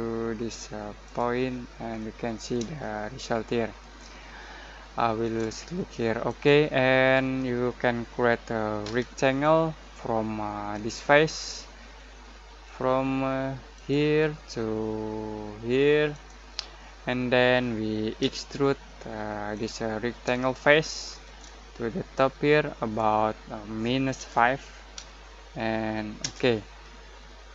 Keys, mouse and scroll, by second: 1.9 middle click, 2.7-6.2 shift+middle drag, 6.2 click, 8.8 r, 10.7 click, 12.1-13.7 middle drag, 13.7 click, 16.1 click, 18.2 e, 19.5 click, 19.7 click, 20.4-22.1 shift+middle drag, 22.1-24.1 drag, 24.1-24.9 typing, 26.2 Return.